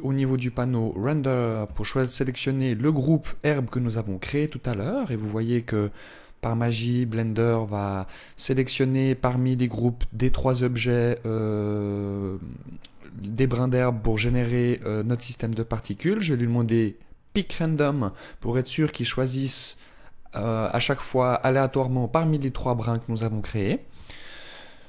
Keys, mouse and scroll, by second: 0.6 click, 16.9 click.